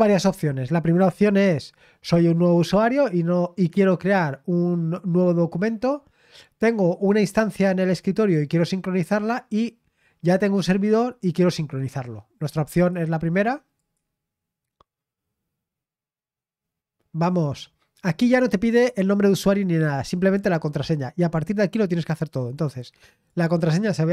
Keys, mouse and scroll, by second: 12.7 click, 13.7 click, 23.1 click.